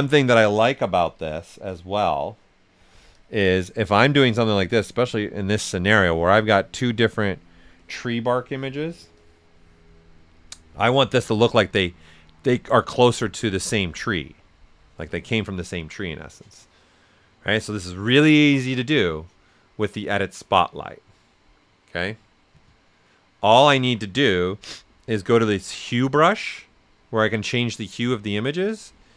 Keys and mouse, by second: 0.4-13.5 ctrl+drag, 3.1 typing, 13.5-16.9 ctrl+drag.